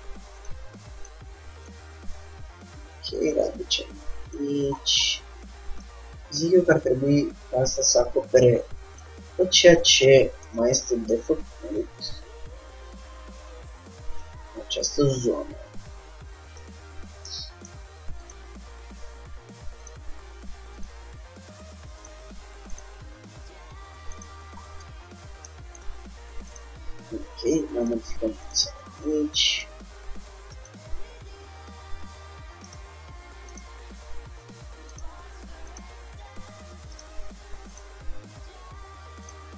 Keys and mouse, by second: 1.8 shift+d, 2.8 click, 3.5 middle click, 4.5-7.7 drag, 6.5 g, 7.9-9.5 drag, 8.3 r, 9.5-11.0 middle drag, 11.1-14.0 middle drag, 13.9 s, 14.6 g, 17.4 middle click, 18.4-20.4 drag, 18.7 g, 20.4 r, 21.3 g, 22.3-25.8 drag, 23.2 g, 25.0 Tab, 26.1 click, 26.7-28.1 drag, 28.1 g, 28.7-30.4 drag, 28.9 g, 30.7-32.4 drag, 32.2 g, 33.6-35.4 drag, 34.1 g, 35.8-37.7 drag, 36.0 g, 37.9-39.5 drag, 38.0 g.